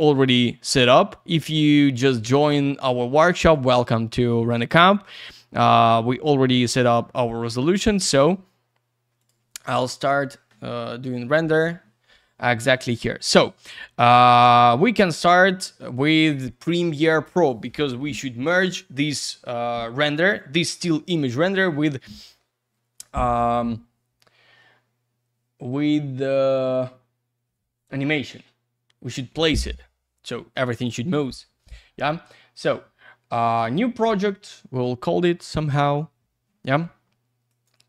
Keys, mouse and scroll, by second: 0.0 click, 1.4 click, 2.3 click, 2.4 click, 3.4 click, 3.5 click, 4.7 click, 4.8 click, 7.2 click, 9.2 click, 9.2 click, 14.4 click, 14.5 click, 33.6 click, 33.7 click, 37.5 click, 37.6 click.